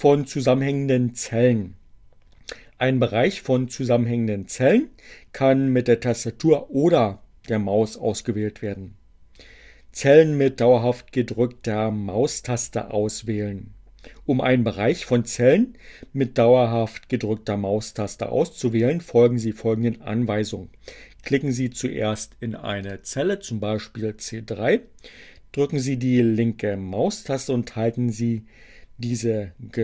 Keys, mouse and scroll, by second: 21.9 click.